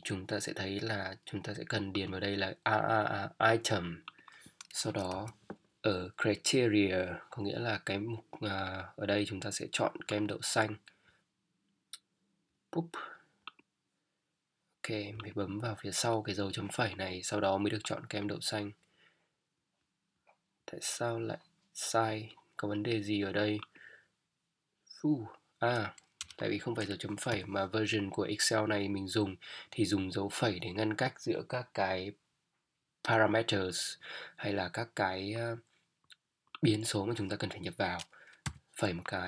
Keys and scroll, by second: 5.1 ;, 26.2 BackSpace, 27.3 ,, 38.4 ,.